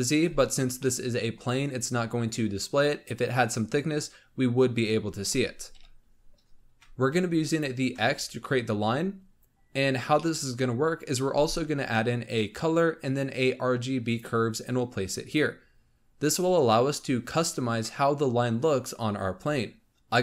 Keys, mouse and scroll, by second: 0.7-1.5 middle drag, 1.5-2.5 scroll down 3, 2.5-3.0 scroll up 1, 5.6 KP_7, 7.4 ctrl+shift+click, 8.4-9.4 scroll up 2, 9.4-10.1 scroll down 4, 10.1-11.2 middle drag, 11.2 shift+a, 16.0-18.0 scroll up 4.